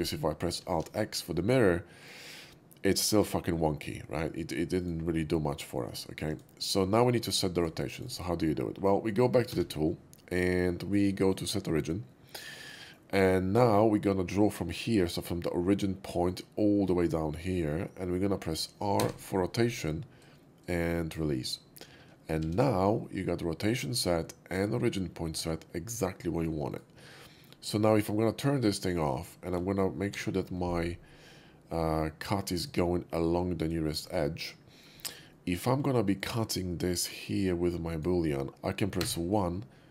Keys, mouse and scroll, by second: 0.6 alt+x, 1.3-2.1 middle drag, 3.0 shift+middle drag, 4.7 shift+click, 5.4-5.8 shift+middle drag, 6.3 click, 6.8 shift+middle drag, 7.1 shift+middle drag, 7.6 shift+click, 8.0 shift+right click, 9.0 shift+middle click, 9.5 q, 11.2 click, 12.0-12.4 middle drag, 12.6 middle click, 16.2-21.1 drag, 19.0 r, 21.1 r, 22.4 alt+x, 23.0 alt+x, 23.0-24.4 middle drag, 24.5-26.4 middle drag, 26.7 right click, 27.2 middle drag, 27.7 shift+middle click, 28.6 shift+click, 30.1 shift+v, 32.5 click, 33.4 click, 34.7 shift+middle drag, 35.0 shift+middle click, 35.3 shift+middle drag, 36.1 click, 36.7-38.0 shift+drag, 38.5 q, 39.0 1.